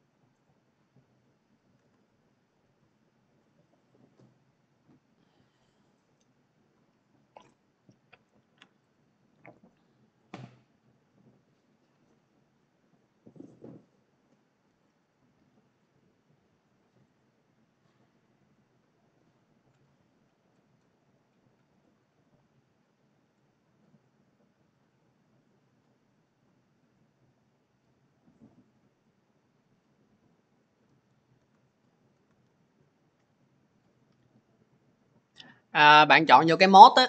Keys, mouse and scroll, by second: 0.3 click, 1.6 alt+Tab, 2.4 alt+Tab, 8.8 click, 17.1 click, 17.9 click, 19.1-21.8 scroll, 22.1-24.2 scroll, 24.2-26.0 scroll, 26.1-28.7 scroll, 28.9 scroll, 29.0 click, 31.2 alt+Tab, 32.0 alt+Tab.